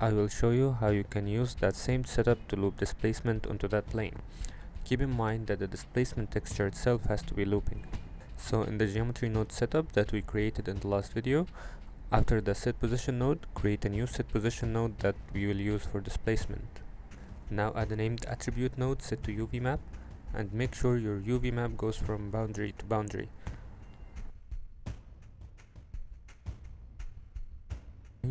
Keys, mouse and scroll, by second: 1.2 middle click, 1.7 middle click, 3.6 click, 7.6 click, 8.5 g, 10.0 click, 10.6 shift+a, 14.1 middle click, 14.5 shift+click, 14.9 click, 15.2 shift+a, 18.8-19.8 drag, 21.7 click, 22.9 Tab, 23.1 a, 26.9 click, 28.2 click.